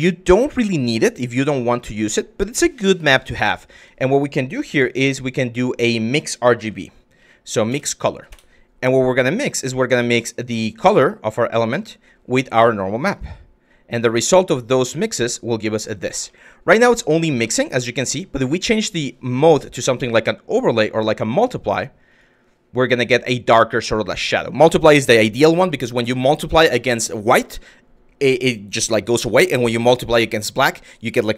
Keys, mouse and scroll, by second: 0.4 click, 2.1 click, 2.7 drag, 3.4 Tab, 4.3 shift+a, 9.8-11.0 drag, 11.9-12.7 drag, 13.3-14.4 drag, 15.0 click, 15.9-16.9 middle drag, 17.1-17.4 shift+middle drag, 18.3-21.8 drag, 23.5 middle drag.